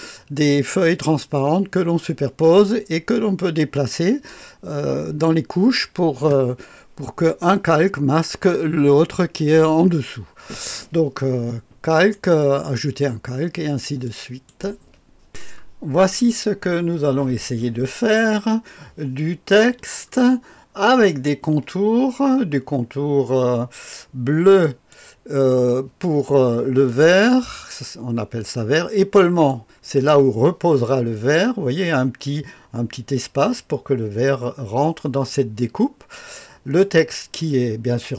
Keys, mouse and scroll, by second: 19.9-21.1 ctrl+scroll up 3, 24.6 click, 26.8 click, 29.1 click, 36.9 click.